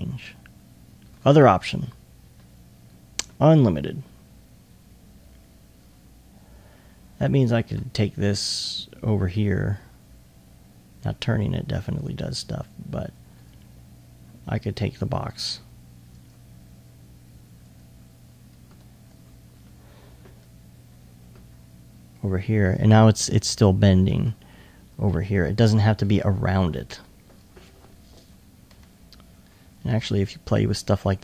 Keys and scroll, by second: 8.5 r, 20.0 e, 29.2 r.